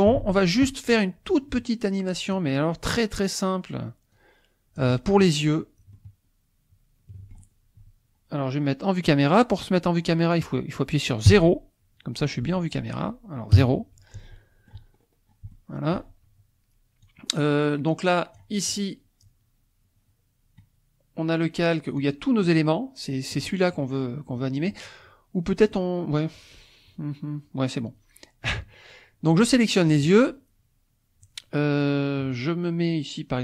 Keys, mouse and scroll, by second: 0.2 ctrl+s, 2.3 click, 4.1 click, 5.9-7.5 shift+drag, 11.3 KP_0, 12.4 shift+middle click, 13.5 KP_0, 14.2-17.0 shift+middle drag, 15.0-15.3 shift+scroll up 1, 17.0-18.5 drag, 22.0-23.1 drag, 25.8 click, 29.9 shift+click.